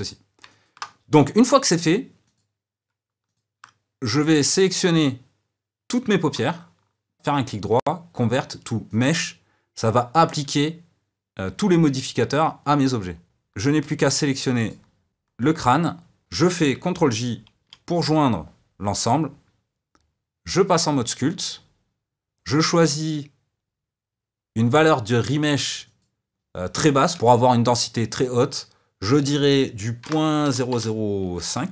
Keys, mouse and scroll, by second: 0.1 click, 0.6-2.3 shift+middle drag, 2.3-3.3 drag, 9.1-14.6 right drag, 14.6 shift+click, 17.7 ctrl+j, 21.0 click.